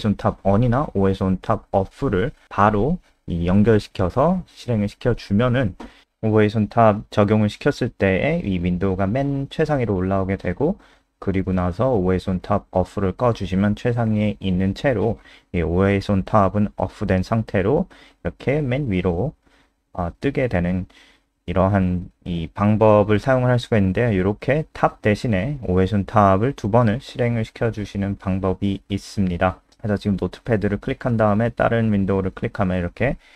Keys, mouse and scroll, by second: 9.6 Delete, 10.0 Delete, 16.1 ctrl+s, 17.0 F5, 27.3 click.